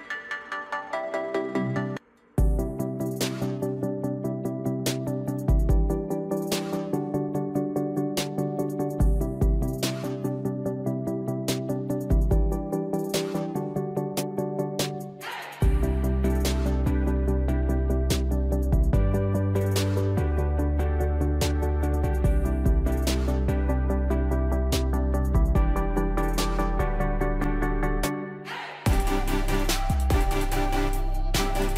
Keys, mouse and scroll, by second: 0.9-6.0 drag, 8.0 ctrl+z, 9.9-15.7 drag, 18.9 click, 20.3 ctrl+click, 22.8 click, 28.5 click.